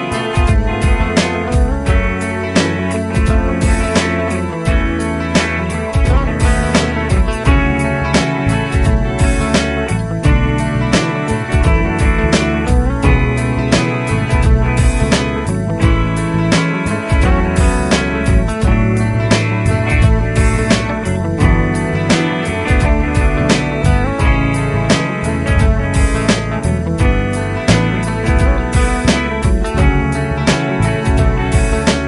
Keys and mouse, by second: 15.4 right click, 16.7 F12, 27.8 ctrl+z, 30.4 ctrl+Down, 30.8 ctrl+Down.